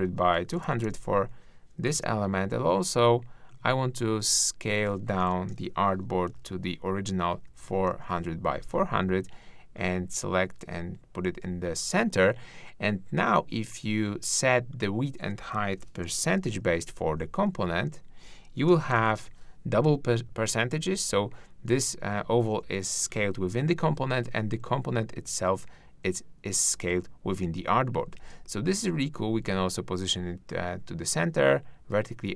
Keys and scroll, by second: 5.2 super+a, 6.2 super+4, 16.5-17.4 typing, 17.7 shift+Tab, 18.6-19.5 typing, 28.1 super+z.